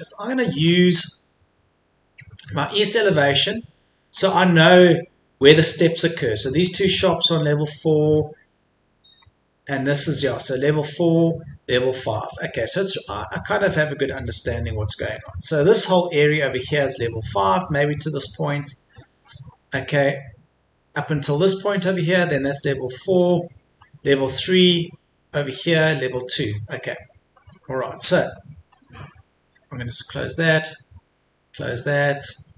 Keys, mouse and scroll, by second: 2.5 click, 4.1-5.5 scroll up 1, 5.5 middle click, 7.1-9.1 scroll down 1, 9.1-10.3 scroll up 1, 10.3-11.5 scroll down 1, 13.3 click, 14.5 middle click, 15.1-18.4 scroll up 1, 18.4 middle click, 19.5-21.9 scroll up 1, 21.9-23.0 scroll down 1, 23.0-24.5 middle drag, 26.5-26.9 scroll up 1, 26.9-27.3 scroll down 1, 27.3-29.6 middle drag, 30.1-32.5 drag.